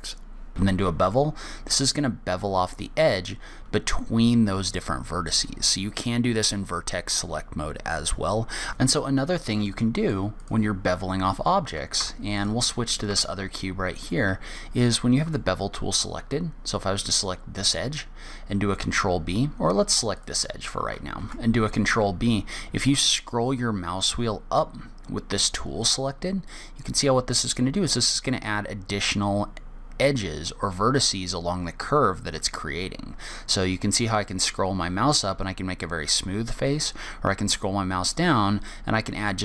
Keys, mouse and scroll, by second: 0.7 ctrl+b, 8.7 ctrl+b, 8.7 shift+click, 9.3 shift+middle click, 10.2 middle click, 10.7 click, 12.3 Tab, 12.7 click, 13.5 Tab, 14.1-14.5 scroll up 1, 14.9 shift+middle click, 18.0 click, 20.5 click, 21.5 ctrl+b.